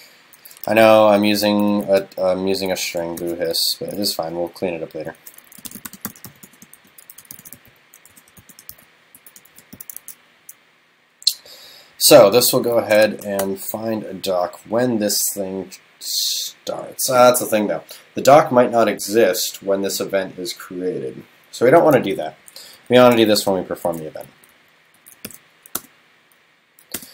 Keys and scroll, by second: 10.1 super+s, 13.0 shift+super+Left, 23.9 super+x, 25.3 super+v.